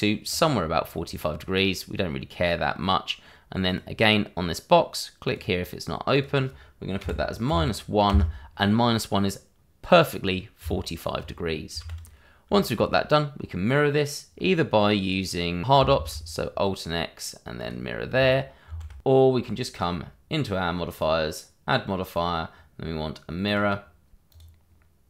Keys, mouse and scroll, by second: 3.6 click, 7.0 -, 7.4 1, 8.0 Return, 10.6 Tab, 11.4-11.7 scroll down 1, 11.8 shift+z, 12.5 shift+middle click, 13.3 middle click, 15.9 alt+x, 17.6 click, 18.6 ctrl+z, 19.7 click, 22.5 click, 23.4 click, 24.4 click.